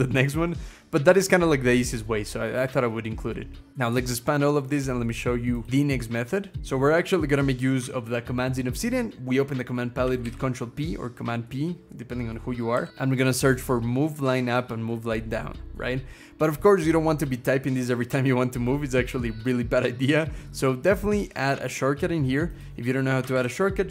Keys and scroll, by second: 5.7 scroll down 1, 6.5 scroll down 1, 6.6 Caps_Lock, 10.0 ctrl+p, 12.3-13.3 typing, 23.1 ctrl+,.